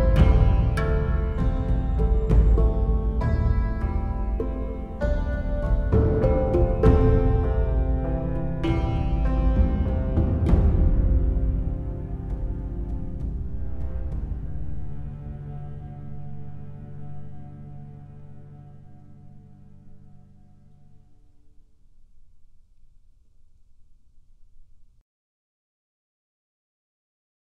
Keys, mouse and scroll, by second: 0.4 right click, 0.7 right click, 1.0 right click, 1.8 right click, 2.4 right click, 3.4 right click, 4.4 right click, 5.3 right click, 5.8 right click, 20.6 right click, 20.9 right click, 21.1 right click, 21.3 right click, 22.3 right click, 22.5 right click, 22.8 right click, 23.8 right click, 24.6 right click, 24.8 right click, 25.8 right click, 26.0 right click, 26.2 right click, 26.6 right click.